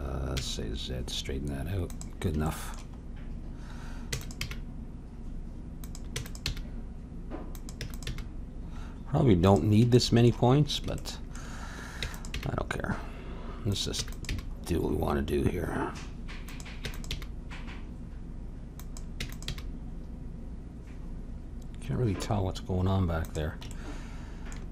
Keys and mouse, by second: 2.4-5.7 middle drag, 4.0 e, 4.4 g, 6.1 e, 6.4 g, 7.8 e, 8.1 g, 12.0 e, 12.3 g, 13.9 e, 14.3 g, 16.8 e, 17.1 g, 19.1 e, 19.5 g, 23.7 middle click.